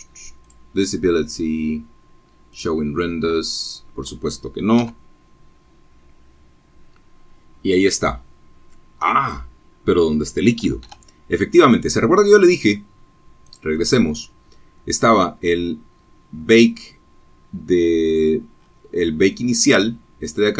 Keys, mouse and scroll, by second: 0.0 click, 2.5 F12, 5.1-5.7 scroll down 2, 8.3 Escape, 10.9 click, 12.6-13.2 scroll down 2, 13.8 scroll down 2, 14.6-15.0 scroll down 2, 16.1-16.4 scroll up 2, 16.9-17.3 scroll up 2, 18.0-18.6 scroll down 4.